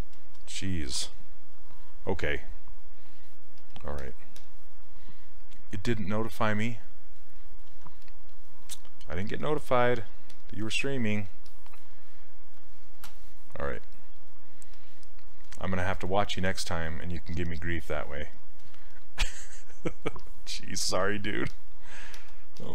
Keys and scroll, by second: 12.6 ctrl+shift+space.